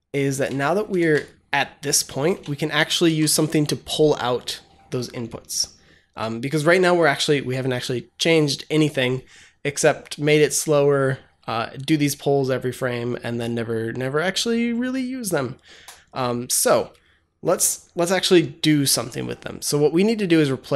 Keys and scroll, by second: 0.4 Tab, 0.8 ctrl+s, 2.2 BackSpace, 2.9 ctrl+s.